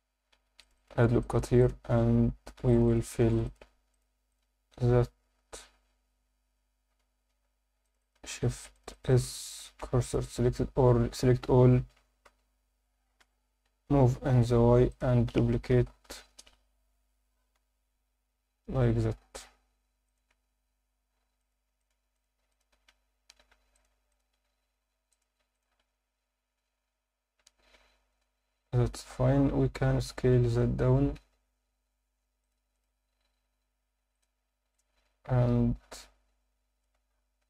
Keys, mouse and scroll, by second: 0.3 ctrl+r, 0.7 click, 1.2 click, 1.6 shift+click, 2.5 ctrl+r, 2.9 click, 3.2 ctrl+r, 3.9 click, 4.3 shift+click, 5.4 f, 6.2 f, 7.0 Tab, 7.3 Tab, 7.8 click, 8.0 click, 8.7 click, 8.9 click, 9.8 shift+s, 10.8 a, 11.8 shift+d, 12.2 x, 13.2 Escape, 14.0 g, 14.1 y, 14.9 click, 15.7 ctrl+m, 16.1 y, 16.3 Return, 17.3 g, 17.5 y, 20.0 shift+click, 21.4 click, 21.4 scroll up 1, 21.8 shift+click, 22.1 shift+click, 22.5 shift+click, 23.4 f, 23.7 click, 24.1 shift+click, 25.1 click, 25.5 shift+click, 26.7 f, 27.7 Tab, 27.7-28.8 scroll down 5, 29.6 scroll up 2, 30.3-30.7 scroll up 1, 31.2 s, 32.4 click, 32.7-34.4 right drag, 34.4 scroll down 1, 34.7-36.8 alt+middle drag.